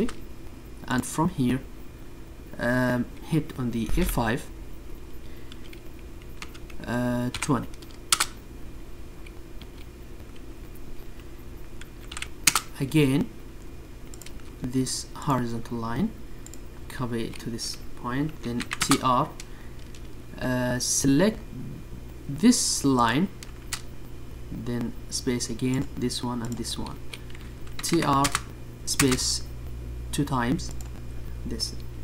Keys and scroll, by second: 21.7 space.